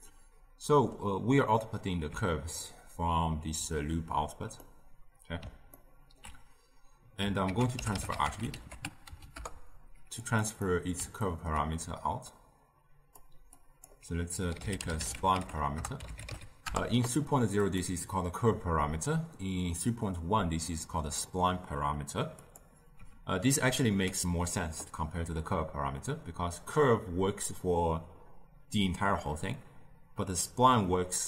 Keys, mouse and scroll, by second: 4.5-7.3 middle drag, 7.3 ctrl+a, 10.6-12.2 middle drag, 12.2 click, 13.5 drag, 22.3 click.